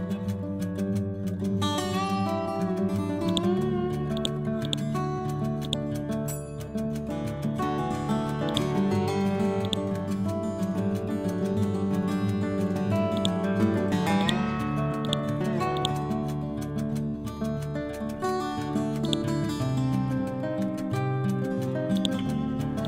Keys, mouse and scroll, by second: 0.0-0.8 typing, 0.9 Return, 3.1-9.5 drag, 9.9 1, 10.9 6, 11.7 Return, 13.1 click, 14.6 c, 14.9 click, 16.3 Up, 18.9 click, 21.8 click.